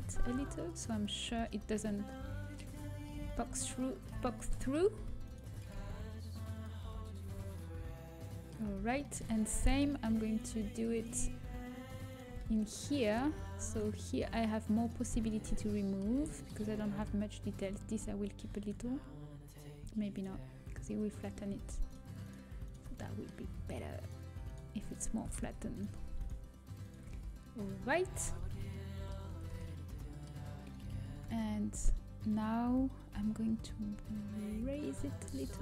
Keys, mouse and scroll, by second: 1.1 middle click, 2.3 a, 4.1-6.7 middle drag, 6.2 g, 6.7-7.7 drag, 7.7 a, 8.9-18.2 middle drag, 18.5-19.7 right drag, 19.7-21.0 drag, 21.0 middle click, 22.9-24.8 middle drag, 25.4 ctrl+z, 26.5 alt+shift+right click, 28.2 Delete, 30.3 Tab, 30.3 a, 31.1 Tab, 33.0 l, 33.7 g.